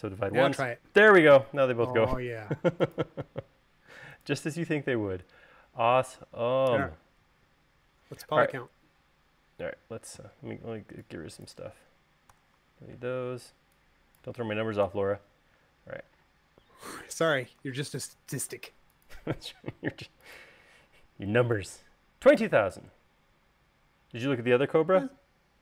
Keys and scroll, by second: 0.2 u, 4.8 space, 13.3 BackSpace, 15.0 BackSpace, 17.9 super+s.